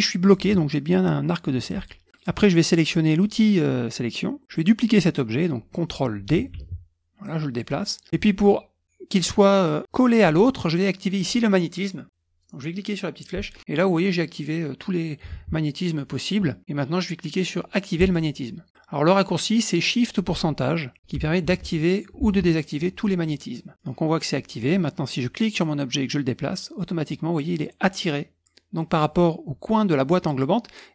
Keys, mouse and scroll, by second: 4.4 click, 7.0 ctrl+d, 7.2 click, 8.8 click, 12.1 click, 18.0 click, 18.7-19.9 drag, 21.5 shift+5, 22.2 shift+%, 25.6-30.9 drag.